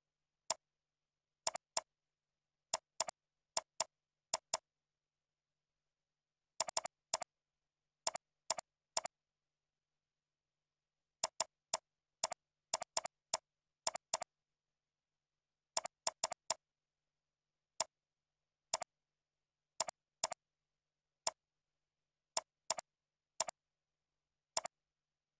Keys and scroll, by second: 5.6 ctrl+Up.